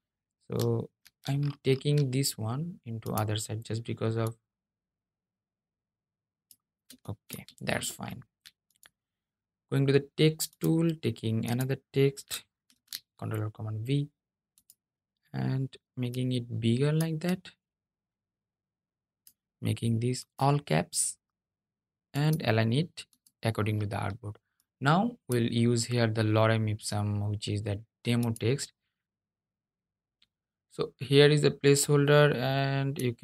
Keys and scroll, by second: 11.8 super+v.